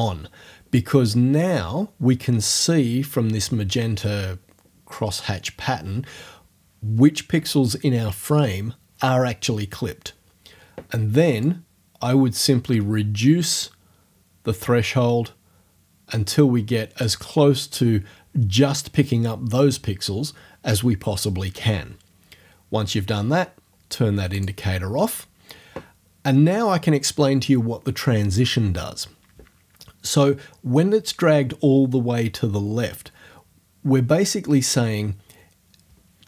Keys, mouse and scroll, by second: 11.4-19.8 drag, 24.4 click.